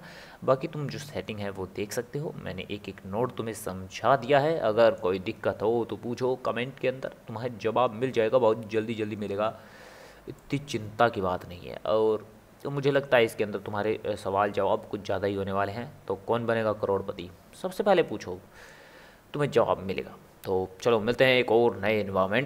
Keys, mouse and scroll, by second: 10.4-13.5 middle drag.